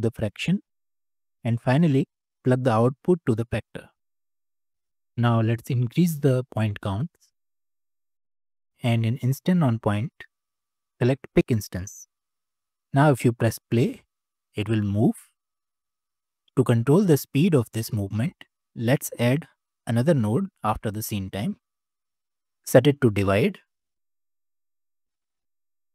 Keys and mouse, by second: 1.0 middle click, 2.7 click, 2.9-3.7 drag, 6.8-7.8 drag, 8.3 middle click, 9.8 middle click, 12.1 middle click, 12.6 click, 13.7 space, 15.4 space, 15.8 click, 16.3 ctrl+z, 19.6 shift+d, 21.7-23.8 drag, 25.0-25.9 drag.